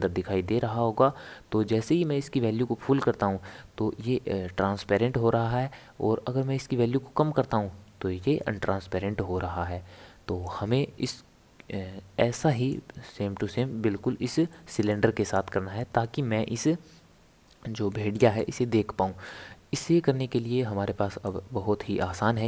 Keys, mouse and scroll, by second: 12.7-14.5 drag, 14.5-15.2 middle drag, 15.2 click, 18.1-19.5 middle drag, 19.5-20.2 scroll down 2, 21.2-22.4 drag.